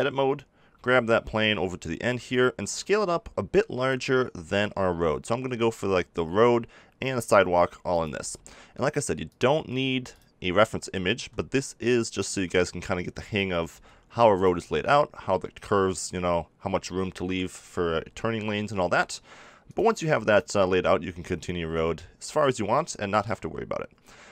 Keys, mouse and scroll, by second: 0.7 g, 2.3-5.8 drag, 2.6 s, 7.1 g, 8.0 click, 8.1 s, 9.2 click, 9.5 g, 11.1 g, 12.2 s, 13.7 g.